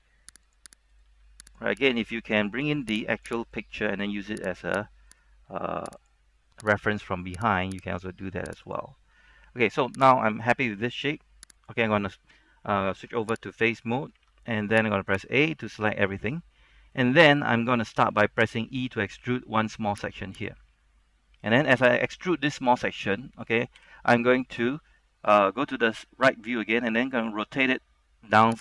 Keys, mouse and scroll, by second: 0.6 click, 1.0 right click, 1.2 g, 1.6 click, 1.9 right click, 2.1 g, 3.3 click, 3.5 right click, 3.7 g, 4.7 click, 5.2 right click, 6.1 click, 6.9 right click, 7.7 click, 8.1 right click, 8.8 click, 9.6-10.4 scroll up 1, 10.4 right click, 11.7 click, 13.7 ctrl+Tab, 13.7 click, 15.2 ctrl+Tab, 15.2 click, 15.9 a, 16.4 scroll down 1, 16.5 middle click, 17.3 scroll up 1, 17.5 shift+middle click, 18.0 scroll down 1, 18.4 shift+middle click, 19.3 e, 20.4 click, 21.2 middle click, 21.8-23.9 scroll up 1, 23.9 KP_3, 24.5-25.0 scroll up 1, 25.0-26.2 shift+middle drag, 26.9 r.